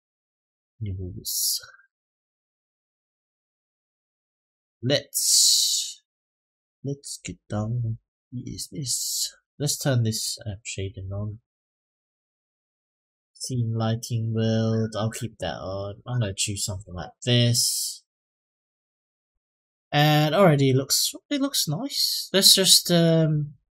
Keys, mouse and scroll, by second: 0.7-1.2 scroll down 1, 1.2-2.9 middle drag, 7.3 click, 8.5 click, 10.0 click, 10.8 click, 12.0-14.0 drag, 15.2-17.3 drag, 19.1 click, 23.6-23.7 drag.